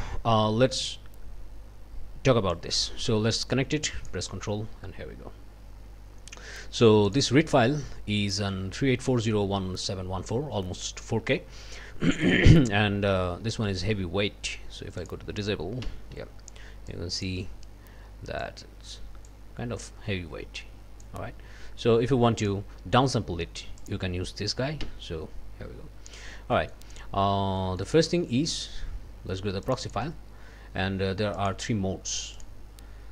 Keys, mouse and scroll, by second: 2.5-4.3 drag, 7.1 click, 15.0 click, 15.8 d, 16.9 click, 18.4-19.4 drag, 19.8-21.2 drag, 22.4 click, 23.8 click, 24.8 d, 26.5 click, 27.2 scroll down 2, 27.6 click, 27.6-28.0 scroll up 2, 29.6 click, 31.4 click, 32.4 click.